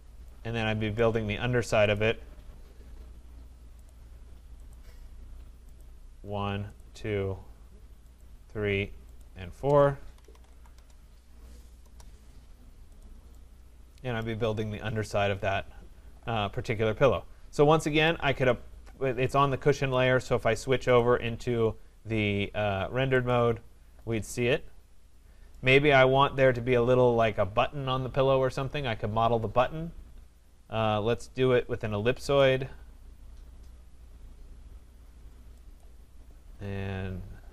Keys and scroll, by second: 10.7 Return.